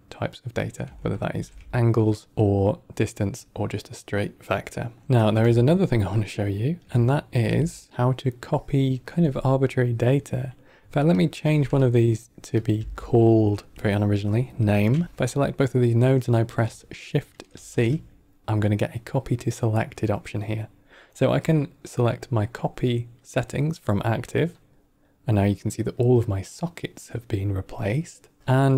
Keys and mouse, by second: 1.2 ctrl+alt+v, 5.0 ctrl+middle click, 6.2-6.6 middle drag, 7.0 ctrl+middle drag, 8.3-8.9 drag, 11.0 click, 11.7 click, 12.5 click, 12.7 F2, 15.0 alt+c, 15.0 click, 17.4 shift+c, 28.4 click.